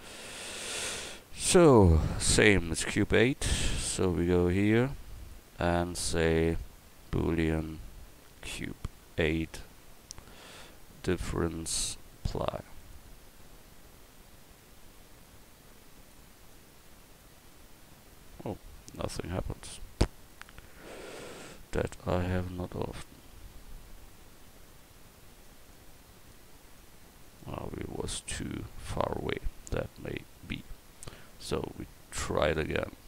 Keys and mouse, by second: 21.7 click, 22.4 ctrl+z, 28.0-33.0 drag, 31.3-33.0 right drag.